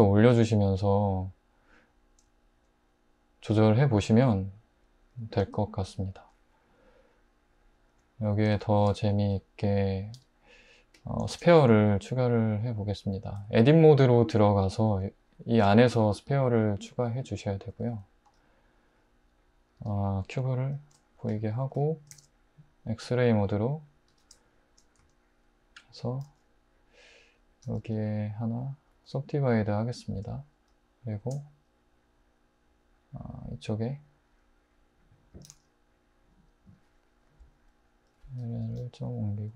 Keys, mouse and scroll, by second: 5.2-7.5 middle drag, 10.2 Tab, 11.3 shift+a, 13.4 ctrl+shift+z, 15.6 shift+a, 18.3 g, 19.8 Tab, 20.8 alt+h, 22.1 alt+z, 24.1 Tab, 25.0 s, 26.3 g, 27.7 s, 31.2 shift+d, 35.5 g, 37.6 l, 38.1 l, 39.0 g.